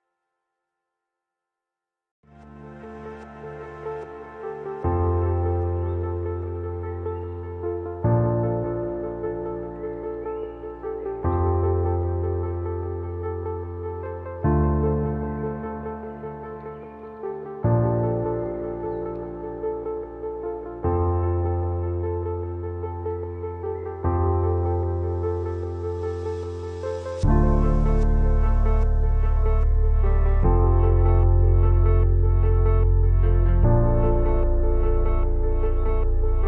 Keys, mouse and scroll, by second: 1.1 alt+scroll up 1, 2.2 alt+scroll up 1, 2.7 space, 2.8 click, 3.3 space, 3.9 click, 5.6 shift+click, 6.4 ctrl+t, 7.7-9.8 alt+shift+drag, 10.5-11.3 scroll down 2, 12.0-12.7 scroll down 1, 12.7 click, 14.5 shift+click, 15.3 ctrl+t, 16.5-18.1 alt+shift+drag, 18.8-19.2 scroll down 2, 20.7 click, 22.9 ctrl+t, 24.7 click, 26.3 ctrl+t, 27.3-28.9 alt+shift+drag, 30.1 alt+scroll up 1, 30.7 space, 30.9 click, 31.3 space, 32.4 click.